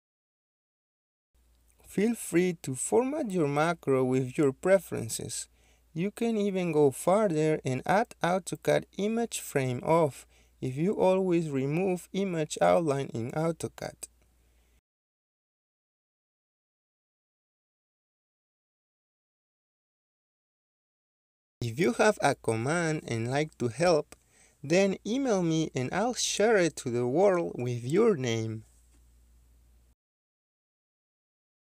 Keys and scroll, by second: 11.6 Escape, 14.9-16.3 typing, 17.6 Return, 17.6 typing, 19.5-20.3 typing, 20.7 Return, 24.8-25.6 typing, 26.5 Return, 28.6 1, 29.3 Return.